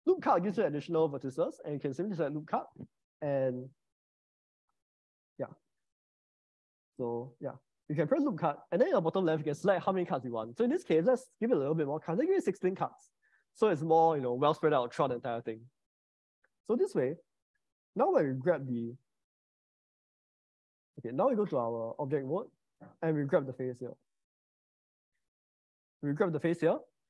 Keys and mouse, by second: 1.6 click, 7.2 ctrl+z, 8.1 click, 9.4-12.7 drag, 16.4 Tab, 17.1 middle click, 18.5 g, 19.9 g, 20.6 Tab, 21.6 Escape, 22.1 Tab, 25.3 click.